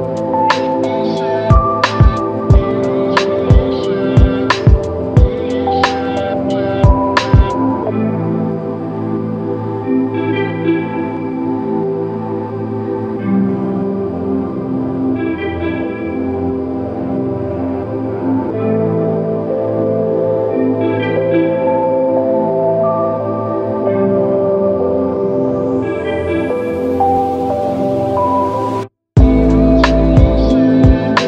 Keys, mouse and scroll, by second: 0.5 q, 4.2 q, 11.3 alt+click, 12.6 ctrl+click, 15.1 ctrl+click, 16.9 w, 24.6 ctrl+click, 25.9 ctrl+click, 27.5 ctrl+click, 28.6 ctrl+click, 28.8 ctrl+click, 30.9 ctrl+click.